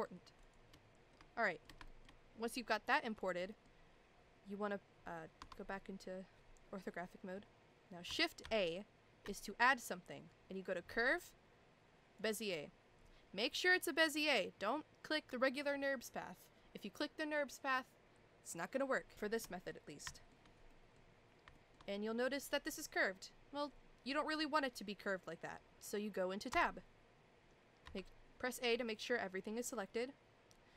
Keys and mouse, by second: 0.4 shift+click, 1.1-1.6 shift+middle drag, 1.8 shift+middle drag, 3.5 middle click, 5.4 KP_1, 8.4 shift+a, 19.2 shift+middle drag, 20.1 shift+middle drag, 20.7 middle drag, 21.5 shift+middle drag, 21.9 middle click, 26.5 Tab, 27.8 a.